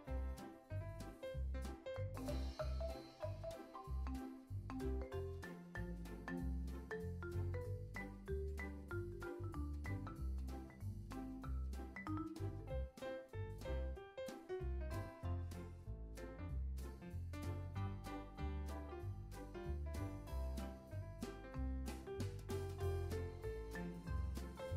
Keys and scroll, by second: 0.7 alt+shift+w, 10.6 x, 15.8 x, 18.4 z, 19.5 x, 21.2 z, 22.7 super+s.